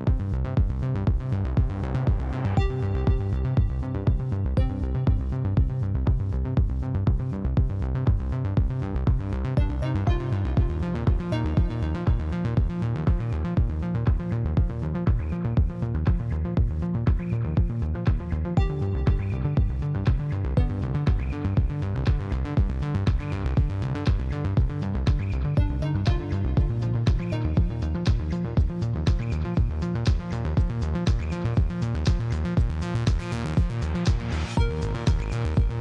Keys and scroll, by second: 0.4 Tab, 1.2 5, 1.3 Return, 1.6 Tab, 3.9 ctrl+c, 4.8-5.6 typing, 5.2 Return, 8.4 e, 8.7 7, 8.8 b, 9.0 Return, 9.7 Tab, 10.1 2, 10.5 ctrl+b, 10.6 ., 10.7 Return, 11.2 3, 12.2-14.4 typing, 15.6 s, 17.1-17.6 typing, 17.8 Return, 19.8 5, 20.9 Tab, 25.9 Tab, 26.6 2, 27.3 ctrl+b, 27.3 ., 27.5 Return, 28.8 3, 29.8 c, 29.9 e, 30.0 a, 30.1 Return, 31.9 ctrl+v, 32.2 g, 32.9 x.